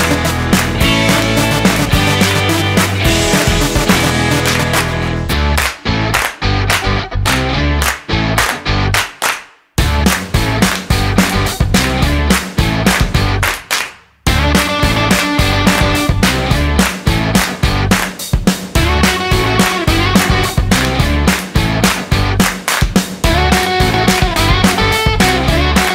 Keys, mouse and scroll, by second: 5.1 click, 7.0 click, 10.2 click, 12.3 click, 15.0 click, 16.0 click, 22.3 click, 22.3 middle click, 22.3 scroll down 10, 24.1 click.